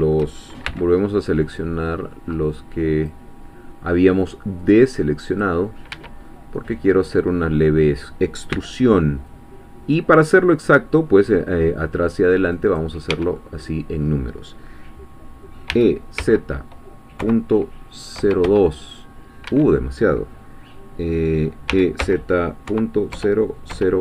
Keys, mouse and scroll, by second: 0.7 shift+c, 1.6 middle click, 2.1 middle click, 2.5 click, 4.6 click, 5.9 Escape, 6.2-7.6 middle drag, 8.5 c, 9.3-11.1 drag, 12.6 click, 13.1 Escape, 13.4-15.7 middle drag, 15.7-18.4 typing, 19.5 Escape, 21.7 e, 22.0 z, 22.7 ., 23.1 0.